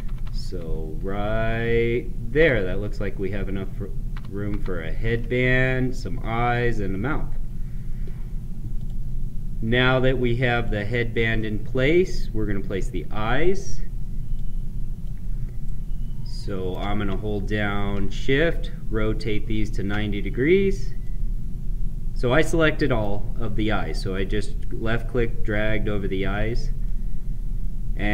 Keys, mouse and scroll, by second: 4.4 ctrl+Down, 8.6 click, 11.3-14.2 middle drag, 14.2-15.6 drag, 15.6-18.2 right drag, 18.2-20.9 shift+drag, 20.9-25.5 right drag, 26.3-28.1 middle drag.